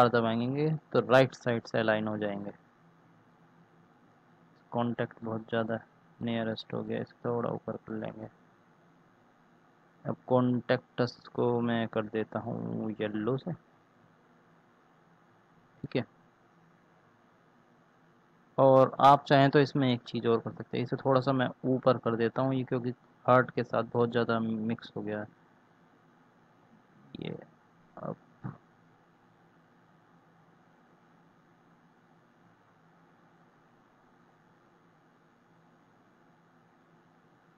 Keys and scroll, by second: 0.2 r, 8.7 r, 26.5 ctrl+z.